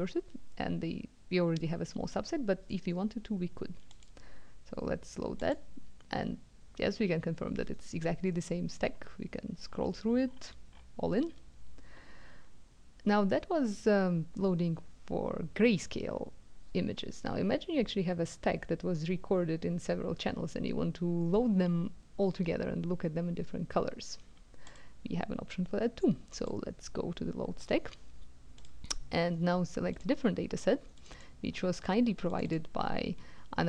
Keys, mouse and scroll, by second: 3.9 click, 5.3 click, 8.7-9.5 scroll up 1, 9.5-10.0 scroll down 1, 10.0-10.7 scroll down 1, 10.7-11.2 scroll up 1, 24.7 click, 26.4 click, 28.6 click, 29.9 click, 31.0 click, 32.3 click.